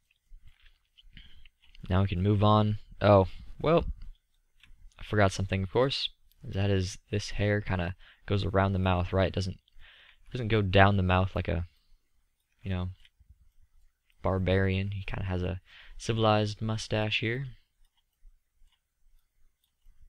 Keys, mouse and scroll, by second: 6.2-8.2 drag, 10.0-10.5 drag.